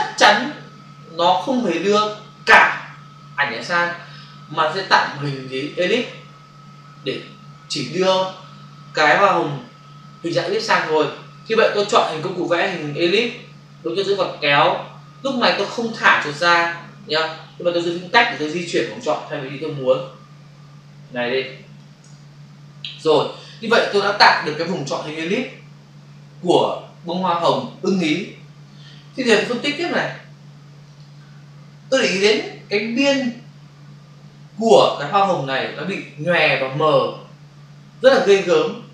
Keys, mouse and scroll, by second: 1.6 click, 12.4 click, 14.1 click, 18.3 space, 30.8 click.